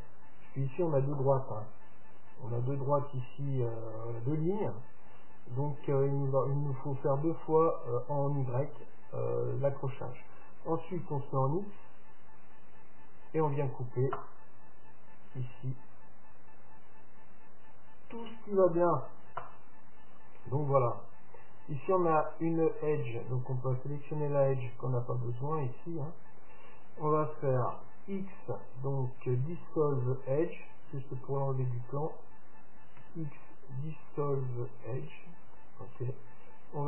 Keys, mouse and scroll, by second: 20.7-23.1 middle drag, 22.3-24.3 right drag, 23.9-25.9 drag, 24.6-27.6 right drag, 27.8 x, 31.8-33.7 right drag, 33.1 x.